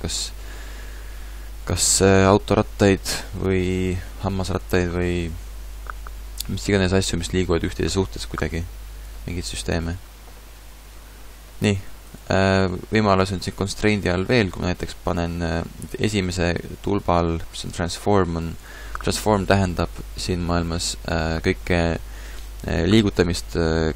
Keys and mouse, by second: 14.1 click.